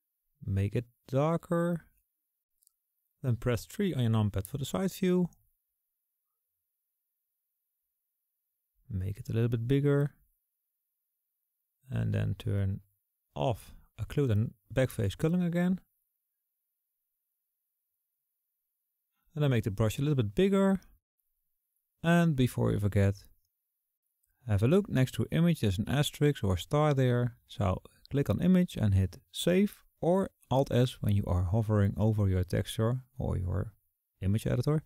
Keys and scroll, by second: 6.1 KP_3, 9.4 KP_3, 21.1-21.6 typing.